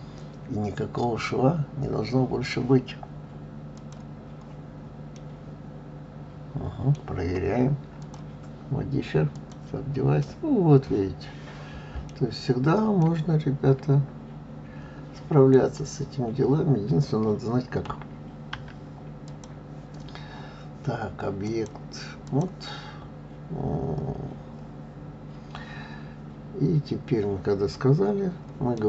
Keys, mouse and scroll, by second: 3.7 click, 5.1-8.0 middle drag, 8.0-10.2 drag, 10.2-12.1 middle drag, 12.1 scroll down 5, 13.0-16.0 middle drag, 19.2 click, 21.4-24.5 drag.